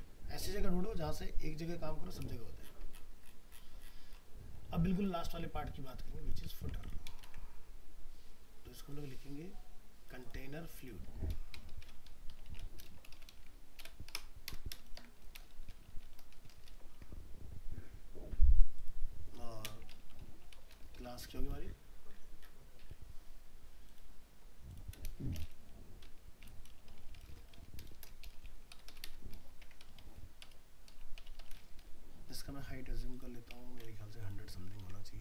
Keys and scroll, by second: 6.6 ctrl+c, 7.3 ctrl+v, 16.9 ctrl+s, 34.8 ctrl+t.